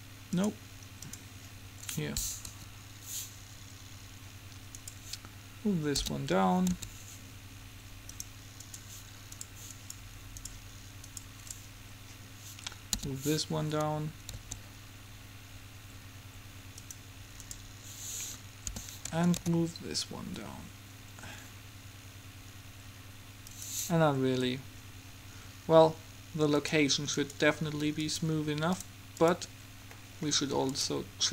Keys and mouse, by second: 0.0-2.6 drag, 2.6 Home, 2.6 right click, 5.0-6.9 right drag, 6.2 g, 13.0 g, 17.6-19.6 right drag, 18.8 g, 26.7-30.0 drag, 30.0-31.3 middle drag.